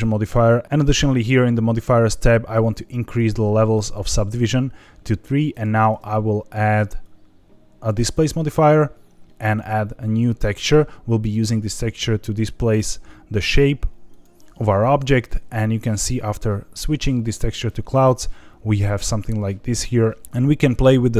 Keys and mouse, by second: 3.9 click, 5.6-8.1 drag, 9.4 click, 11.8-14.2 drag, 20.2 ctrl+z.